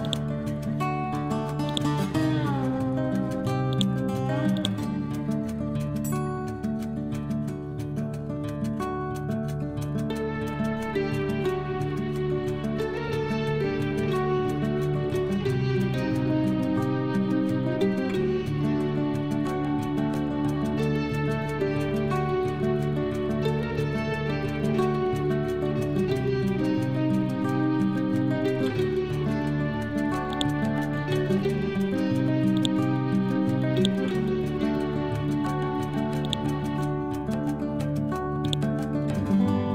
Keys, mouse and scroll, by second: 0.9 ctrl+c, 1.6 click, 2.1 ctrl+v, 3.6 click, 5.4 scroll up 1, 7.9-11.1 typing, 8.0 scroll up 1, 13.3 typing, 18.9-25.8 typing, 21.0 Return, 26.9-28.3 scroll down 1, 30.2 scroll up 1, 30.2-39.7 drag.